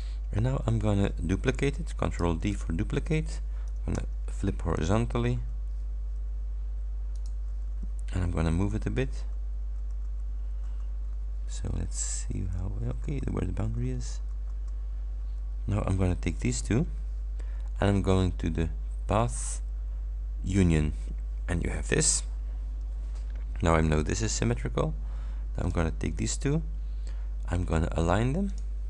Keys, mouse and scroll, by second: 2.3 ctrl+d, 4.0 h, 5.2 Right, 7.2 click, 7.5 Right, 11.1 Left, 12.6 Right, 16.5 shift+click, 19.3 click, 20.5 click, 25.7 shift+click, 28.6 click.